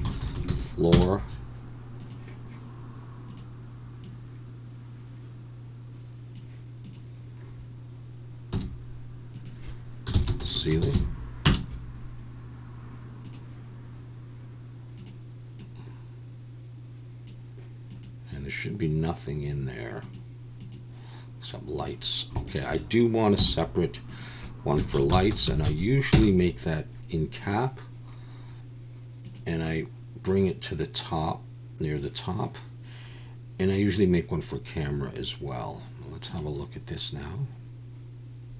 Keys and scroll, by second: 0.3 o, 8.5 m, 23.4 m.